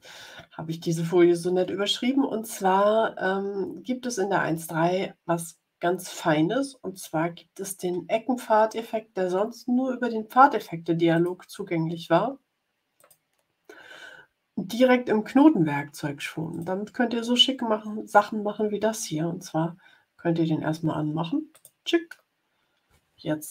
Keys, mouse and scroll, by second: 6.8 click, 11.0 click, 12.9 click, 16.4 click, 21.4 click.